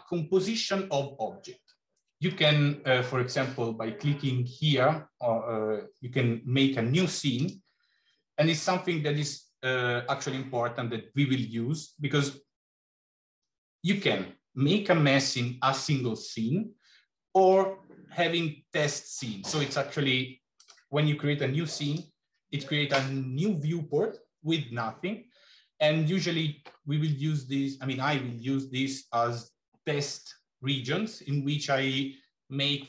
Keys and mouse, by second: 7.3-22.0 drag.